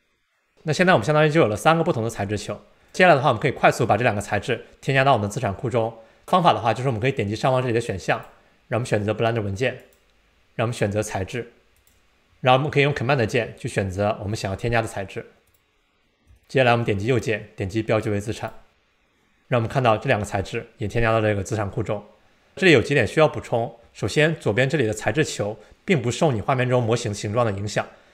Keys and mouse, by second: 0.5 middle click, 8.1-10.0 drag, 11.8 click, 15.5 drag, 17.2-18.5 right drag.